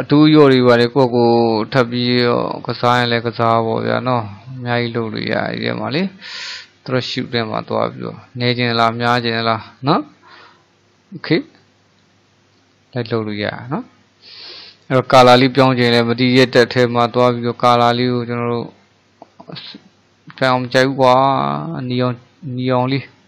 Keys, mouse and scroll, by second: 0.6-5.4 drag, 15.4 click, 17.1 click, 21.4 click.